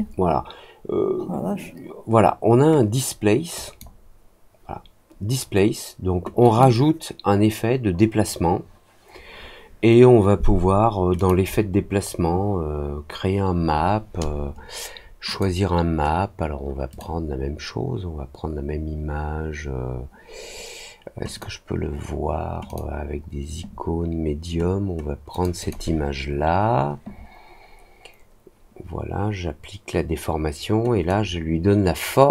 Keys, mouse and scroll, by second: 3.5 click, 6.4 click, 11.1 click, 15.2 click, 16.8 click, 21.3 click, 22.6 click, 25.2 click, 25.5 click, 31.0-32.3 drag.